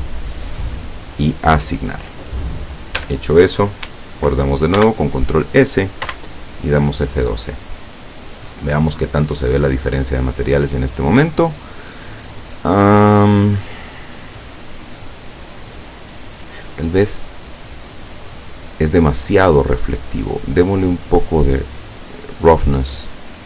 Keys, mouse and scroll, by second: 1.2 click, 3.0 Tab, 4.8 ctrl+s, 5.2 ctrl+click, 6.1 F12, 21.6 click.